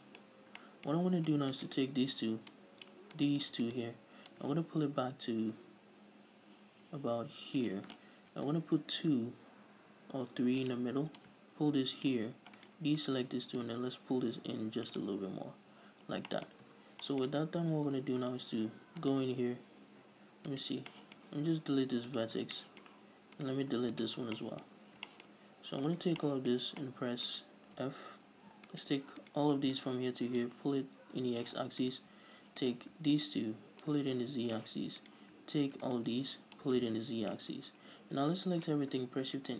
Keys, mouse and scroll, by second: 0.6 scroll up 1, 1.3-1.9 scroll up 2, 1.9 alt+right click, 2.9 click, 3.6 right click, 4.0 shift+right click, 4.7-11.1 drag, 8.7 ctrl+r, 11.6-13.0 drag, 13.0 shift+right click, 13.4 shift+right click, 14.0-16.7 drag, 15.4 Tab, 15.7 scroll down 1, 16.7-19.4 shift+middle drag, 17.0 Tab, 17.8-18.2 scroll down 2, 18.2 scroll up 2, 18.2 Tab, 19.4 right click, 19.7-20.6 scroll up 2, 20.6 scroll up 1, 20.9 right click, 21.1 scroll down 1, 21.3-23.8 shift+middle drag, 21.8 x, 22.8 scroll down 2, 23.8 right click, 24.0 x, 24.6 scroll down 2, 24.7-26.2 shift+middle drag, 25.1-26.2 scroll up 4, 26.2 alt+right click, 26.6-29.1 shift+middle drag, 28.2 f, 29.1 alt+right click, 29.6 right click, 30.1 ctrl+right click, 30.8-32.2 drag, 32.2 alt+right click, 33.0 right click, 33.5 shift+right click, 34.2-35.4 drag, 35.4 right click, 36.2 ctrl+right click, 36.9-38.5 drag, 38.5 a.